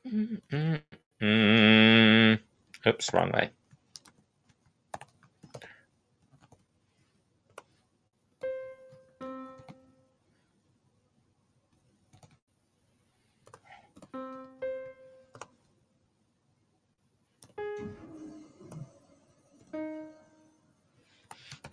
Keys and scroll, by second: 1.7 shift+w, 2.9 shift+q, 8.7-9.4 typing, 11.5 c, 13.4-15.1 typing, 16.9-19.4 typing, 21.0-21.4 typing.